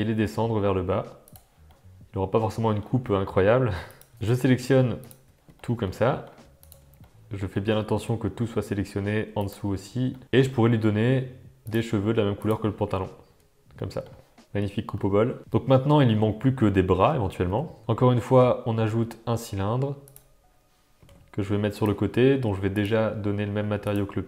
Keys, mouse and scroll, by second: 1.7-2.8 middle drag, 3.9 click, 5.5 shift+click, 5.7 middle click, 5.9 middle click, 7.0 middle click, 8.0 middle click, 10.1 middle click, 10.2 shift+click, 11.6 click, 12.4 click, 13.2 Tab, 13.7-14.1 middle drag, 14.5 alt+a, 14.5-16.1 middle drag, 17.5 Tab, 17.8 Tab, 17.8 shift+a, 20.9 g, 22.7-24.0 drag.